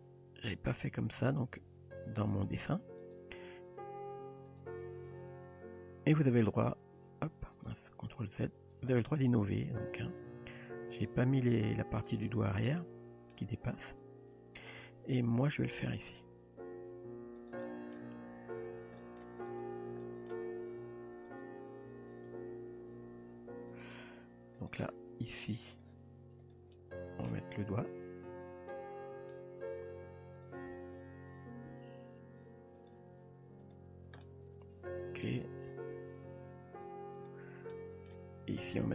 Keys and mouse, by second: 1.7 s, 2.4 g, 3.7 e, 5.1 s, 6.9 g, 9.4 ctrl+z, 10.3 s, 11.1 g, 12.2-13.3 middle drag, 15.5 ctrl+r, 17.6-18.0 middle drag, 19.0 middle click, 19.6 click, 20.0 middle drag, 20.5 g, 22.3 Tab, 23.2 Tab, 23.8 click, 24.6 click, 25.8 click, 26.7-27.3 middle drag, 28.7-29.3 middle drag, 29.8 e, 30.8 s, 34.2-35.2 middle drag, 35.9 g, 37.7-38.1 middle drag.